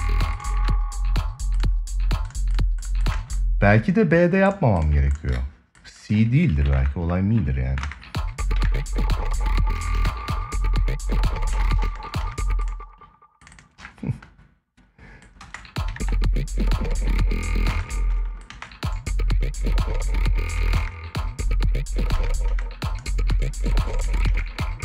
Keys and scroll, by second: 2.9 space, 8.3 ctrl+s, 9.5 space, 11.3 space, 15.1 space, 15.6 ctrl+s, 17.4 space, 20.3 space, 21.9 space, 23.7 space.